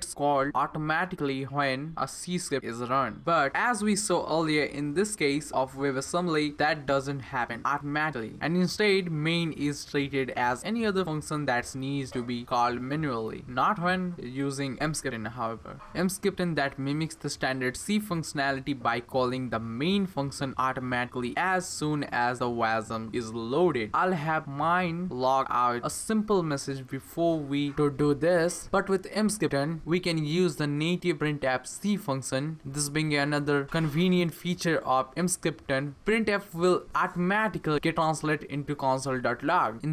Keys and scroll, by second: 24.1 Return, 24.5 Return, 25.6 space, 26.1 space, 27.1-28.9 typing, 29.7 Return, 32.6-35.0 typing, 36.4-39.6 typing.